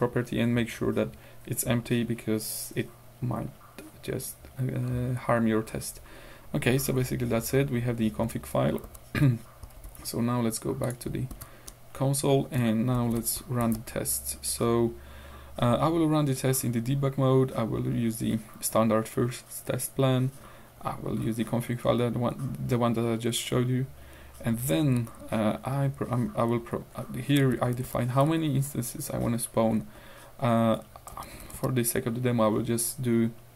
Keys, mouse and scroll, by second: 5.0-5.4 scroll down 2, 5.7-7.3 scroll up 2, 8.9 ctrl+w, 9.8 ctrl+q, 10.9 click, 11.3 ctrl+y, 13.0 shift+d, 13.6 shift+e, 14.4 Up, 16.4 Right, 20.4 Right, 24.3 Right, 26.6 Right, 27.4 Left, 28.3 Right, 30.0 Right, 31.1 Left.